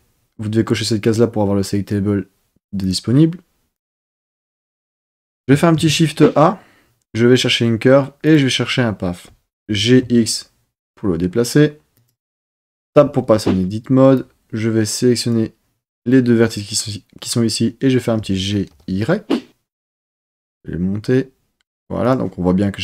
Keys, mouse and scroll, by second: 5.7 shift+a, 9.6 g, 10.0 x, 11.9 click, 12.8 Tab, 14.1-15.5 drag, 18.2 g, 18.7 y, 22.0 click.